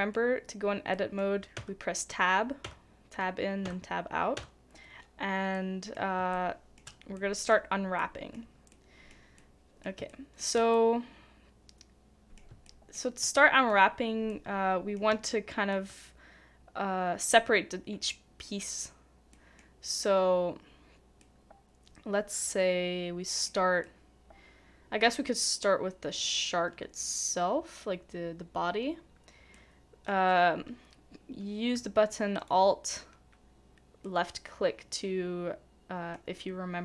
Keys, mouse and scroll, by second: 1.5 Tab, 2.6 Tab, 3.6 Tab, 4.3 Tab, 5.5 middle click, 6.3 shift+middle click, 10.1 shift+middle click, 10.7 shift+middle click, 12.6 shift+middle click, 14.3 shift+middle click, 15.3 shift+middle click, 19.3 shift+middle click, 29.5 middle click, 32.4 alt+click, 34.0 middle click.